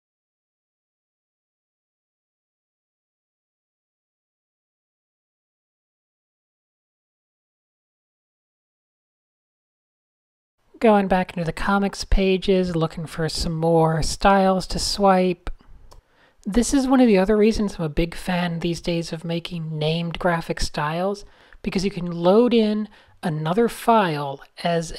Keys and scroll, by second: 8.5 super+s, 9.0 super+n.